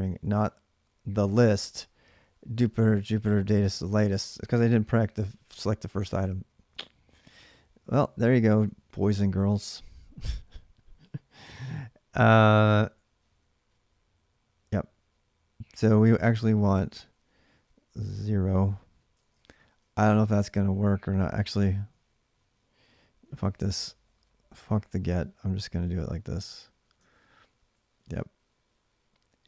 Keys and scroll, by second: 0.0-5.2 typing, 5.2 alt+Tab, 6.0 alt+Tab, 7.1 ctrl+a, 7.2 ctrl+a, 8.2 ctrl+[, 8.4 typing, 12.1 typing, 16.2-19.6 typing, 21.3 ctrl+[, 21.4 ctrl+h, 22.6-27.1 typing, 26.8 ctrl+[.